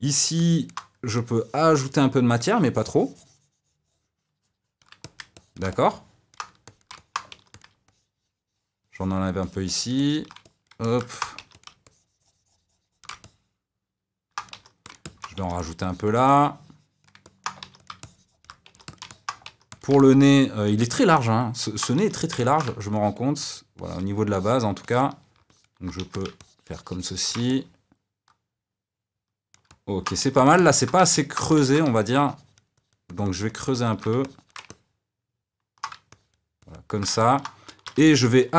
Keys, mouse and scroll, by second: 0.3 middle click, 1.1-5.0 drag, 5.0-6.6 middle drag, 6.6 shift+click, 6.9 middle click, 7.3 f, 7.8-10.4 ctrl+drag, 10.4 middle click, 11.3 f, 11.8-13.2 shift+drag, 13.2-14.5 middle drag, 14.5 f, 15.0 middle click, 15.3 f, 15.8-17.2 drag, 17.2 middle click, 17.6 f, 18.0 shift+click, 18.6 f, 19.1 middle click, 19.4 f, 20.0-22.0 middle drag, 22.0 f, 22.4 middle click, 22.9-26.0 ctrl+drag, 26.0 f, 26.4-27.5 shift+drag, 27.5-30.2 middle drag, 30.2 f, 30.5 ctrl+click, 31.1 middle click, 31.6 ctrl+z, 31.9-34.7 ctrl+drag, 34.7-36.1 middle drag, 36.1-37.2 ctrl+drag, 37.2 middle click, 37.7 shift+c, 37.9 f.